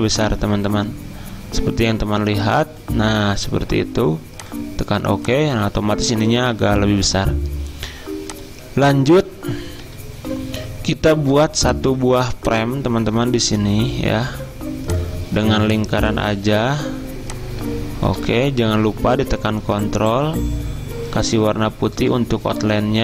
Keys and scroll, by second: 9.8 F10, 11.8 z.